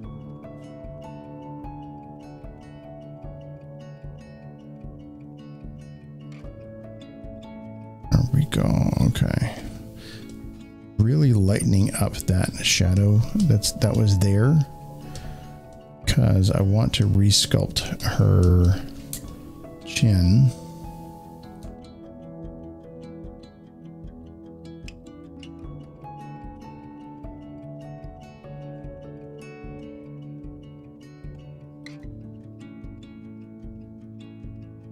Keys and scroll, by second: 19.2 z.